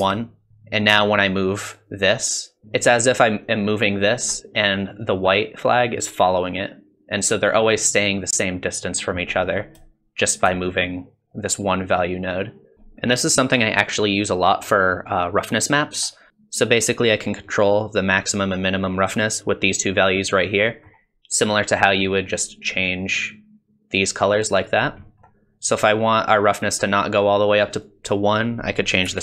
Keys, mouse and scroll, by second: 1.0 shift+click, 2.6 middle click, 3.5 click, 5.0 click, 7.1 click, 9.3 middle click, 10.9 shift+click, 12.7 shift+middle click, 12.7 scroll up 3, 13.0 middle click, 14.6 middle click, 20.6 middle click, 22.4 click, 25.0 middle click, 27.8 click.